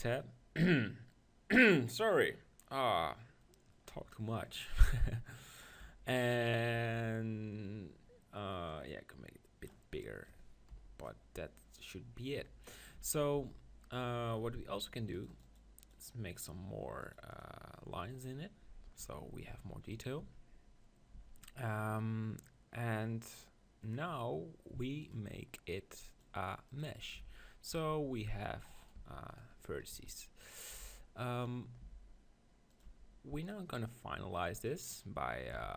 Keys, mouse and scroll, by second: 9.0-10.5 drag, 10.8 KP_1, 12.9 Tab, 13.3 Tab, 15.2-19.0 drag, 19.0 Tab, 19.2 middle click, 19.5 Tab, 20.2 Tab, 21.1 Tab, 26.8 click, 27.2 Tab, 27.7 Tab, 28.6 Tab, 28.8-31.2 right drag, 29.0 Tab, 29.9 z, 30.7 b, 31.8 r, 32.8 click, 33.0 g, 35.4-35.7 drag, 35.5 e.